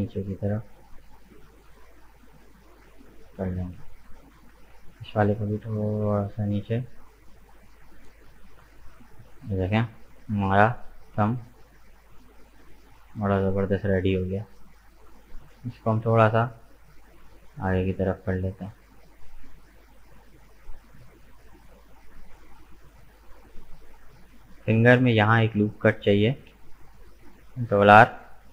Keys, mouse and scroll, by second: 4.3 alt+right click, 5.2 g, 7.9-9.1 middle drag, 9.1 Tab, 9.7 right click, 10.0-11.0 middle drag, 11.0 right click, 11.3 Tab, 11.9-13.9 middle drag, 13.9-15.1 drag, 15.1 right click, 15.8 g, 18.0-19.8 middle drag, 19.8 Tab, 19.9 right click, 20.3 scroll down 3, 20.6-22.4 middle drag, 22.4 right click, 22.7 Tab, 23.0-23.5 scroll up 3, 23.5-26.5 middle drag, 26.5 ctrl+r, 28.1-28.5 middle drag.